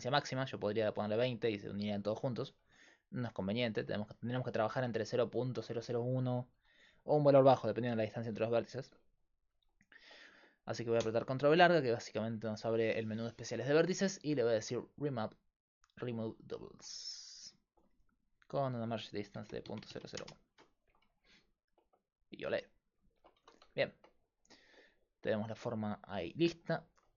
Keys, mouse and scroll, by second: 0.7-2.7 drag, 2.7 ctrl+z, 11.0 ctrl+v, 17.4 middle click, 18.4-19.9 drag, 22.3 right click, 22.9 right click, 23.4 Tab.